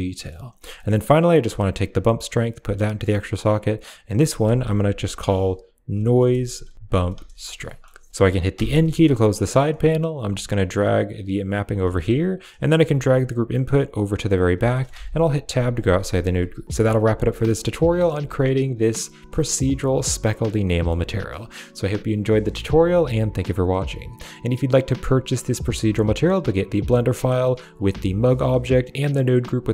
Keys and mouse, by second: 0.6 middle click, 1.8-2.5 drag, 3.3 click, 3.4-7.0 drag, 5.9-6.7 typing, 7.5 middle click, 8.1 middle click, 8.4 n, 8.9 middle click, 9.7 click, 10.1 g, 11.4 click, 11.7 a, 11.8 drag, 12.6 click, 12.7 g, 14.3 click, 14.6 middle click, 14.8 Tab, 15.9 middle click, 17.4 click, 17.8 middle click, 18.1 ctrl+s, 20.0 click.